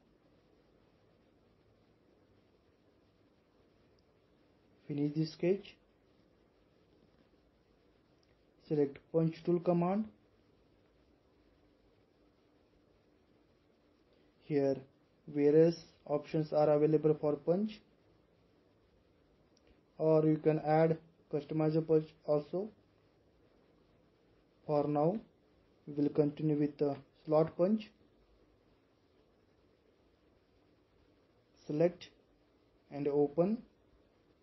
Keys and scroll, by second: 2.9 typing.